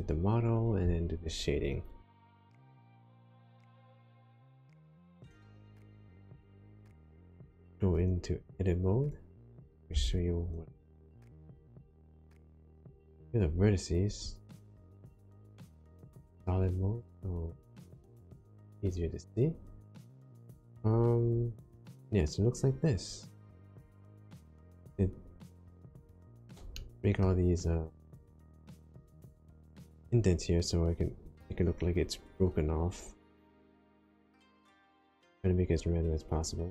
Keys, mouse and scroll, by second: 3.8 shift+middle click, 5.2-5.7 scroll up 2, 6.1 shift+middle click, 9.9 Tab, 12.5 1, 14.8 middle click, 15.6-16.0 scroll up 1, 17.0 click, 18.1 middle click, 26.7 middle click, 28.2 middle click.